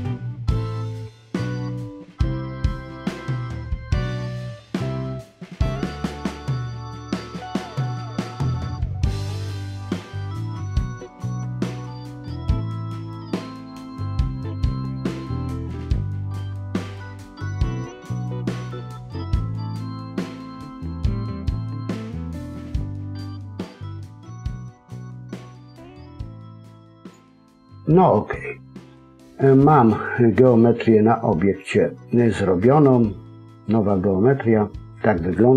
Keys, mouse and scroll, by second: 0.3 c, 0.8 alt+m, 1.3 scroll down 2, 1.4 middle click, 2.6 middle click, 3.5 middle click, 4.1 c, 5.5 f, 5.7 scroll down 3, 5.7 middle click, 6.2-7.0 scroll up 5, 6.3 middle click, 7.2 click, 7.4 shift+click, 7.7-8.1 scroll down 2, 8.1 ctrl+z, 8.4-8.8 scroll up 2, 8.8 g, 10.8 alt+m, 11.3 scroll down 3, 11.4 middle click, 12.5 click, 13.0 middle click, 14.4 ctrl+r, 15.0 scroll down 2, 15.1 middle click, 17.6 ctrl+r, 19.4 middle click, 19.8 ctrl+z, 20.1 middle click, 21.0 KP_3, 21.2 scroll up 1, 21.3-21.8 scroll down 2, 21.4 middle click, 23.3 scroll up 3, 23.7 ctrl+r, 24.6 scroll down 3, 24.7 middle click, 26.1 KP_1, 26.9 click, 27.8-28.1 scroll up 2, 28.9-29.4 scroll up 1, 28.9 a, 29.4 middle click.